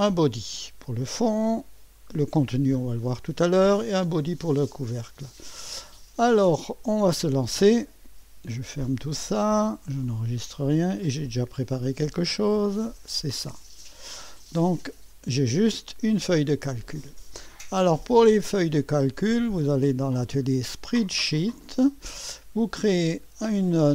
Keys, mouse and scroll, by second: 0.0 click, 3.8 click, 7.8 click, 9.0 click, 10.1 click, 11.2 click, 12.6-14.7 drag, 15.6 click, 18.8 click, 20.9 click.